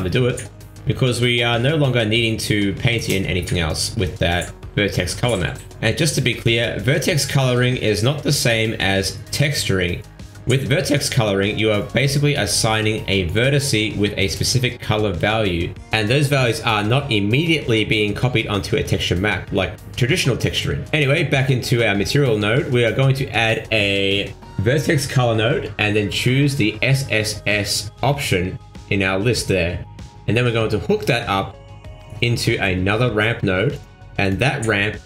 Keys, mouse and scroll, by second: 9.4 scroll down 1, 10.9 middle click, 12.3-13.7 scroll down 15, 13.5 middle click, 14.1 middle click, 15.1 click, 15.9 click, 16.9 middle click, 17.2 shift+a, 20.3 scroll up 3, 20.7 click, 21.0 click, 22.6 click, 23.8 middle click, 24.3 shift+a, 29.1-31.7 scroll up 8, 32.1 ctrl+shift+click, 33.3 click.